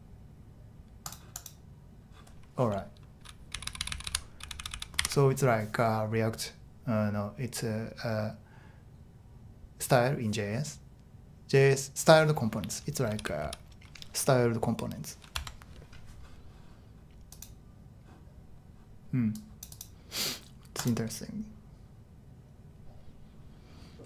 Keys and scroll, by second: 3.3-5.5 typing, 13.1 typing, 15.3 typing.